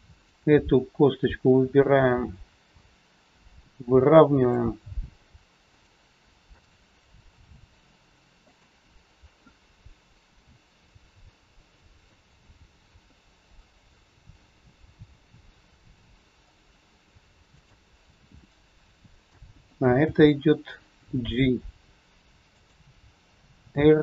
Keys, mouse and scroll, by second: 0.3 shift+click, 2.2 r, 6.4 click, 7.2 r, 11.3 middle click, 13.4 middle click, 13.4 scroll up 1, 16.8 click, 17.6 shift+click, 18.4 middle click, 20.0 g.